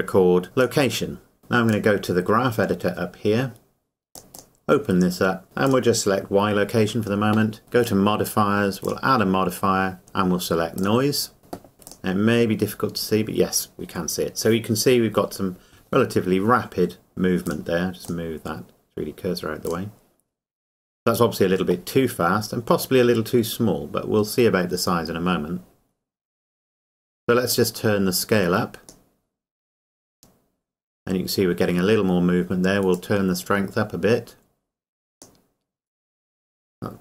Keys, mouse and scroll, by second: 0.6 click, 4.1 click, 4.4 click, 5.7 click, 7.8 click, 11.7 scroll up 1, 11.9 click, 12.3 scroll up 1, 17.5 click, 24.2-24.6 scroll down 1, 27.6 click, 32.9 click.